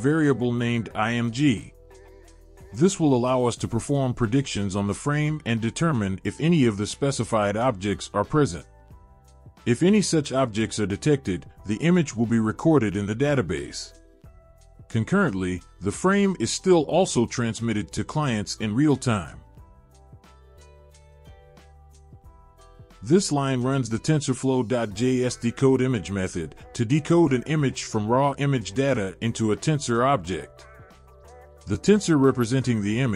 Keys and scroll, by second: 6.4 ctrl+v, 13.4 Return, 14.0 ctrl+v, 22.5 Return, 22.7 Return, 23.0 ctrl+v.